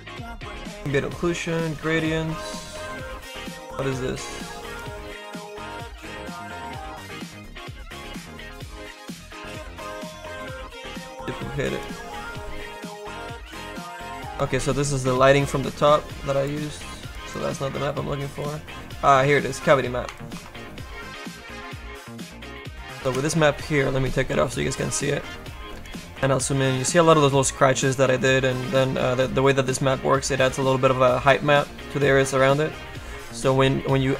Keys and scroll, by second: 12.9 ctrl+KP_Subtract, 16.3 Delete, 23.2 ctrl+KP_Subtract, 24.9 F2, 25.6 space, 26.2 F2, 26.9 F2, 33.2 F1.